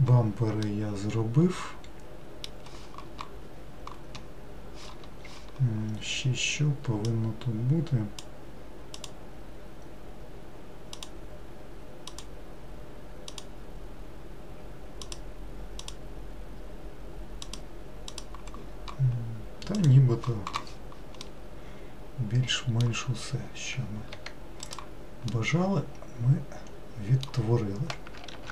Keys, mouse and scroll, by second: 24.3 Tab, 24.9 click, 25.5-27.6 middle drag, 27.6-28.2 scroll down 1.